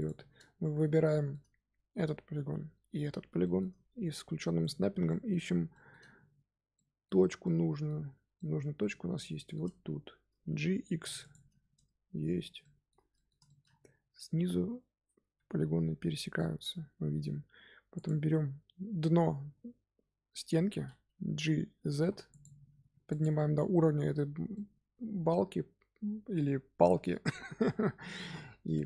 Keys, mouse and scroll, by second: 0.6-1.0 scroll down 1, 1.0-4.5 shift+middle drag, 4.5 click, 5.0-5.4 shift+middle drag, 5.4-6.7 scroll up 7, 5.6 shift+middle drag, 6.7-7.1 middle drag, 7.1 scroll down 1, 7.4-9.6 shift+middle drag, 9.6-10.8 scroll up 2, 10.8 g, 11.7 Tab, 11.9-12.5 scroll down 8, 12.5-13.6 shift+middle drag, 13.6-14.1 scroll up 4, 14.1 Tab, 15.2 z, 17.9 click, 19.3 z, 21.8 g, 22.7 Tab, 23.0 click, 24.5-27.5 middle drag, 27.9 scroll down 1, 28.1-28.8 middle drag.